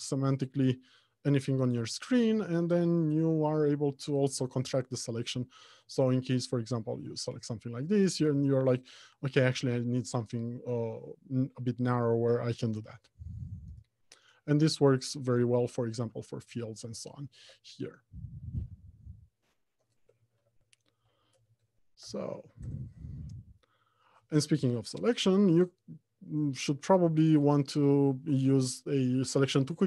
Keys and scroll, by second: 1.5 ctrl+shift+w, 12.5 ctrl+w, 20.6 alt+Home, 21.1 Left, 21.6 Return.